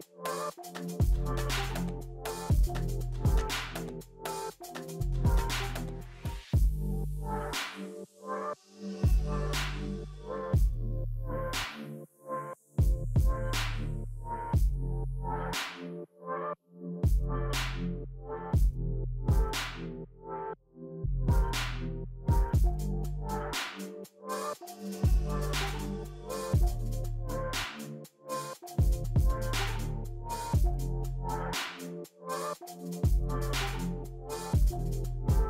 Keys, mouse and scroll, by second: 1.1 double click, 3.5-4.9 typing, 6.4 2, 11.9 scroll down 2, 12.2 middle click, 12.8 scroll up 3, 15.2 middle click, 16.4 double click, 20.7 double click, 22.7 double click, 29.9 double click, 29.9 double click.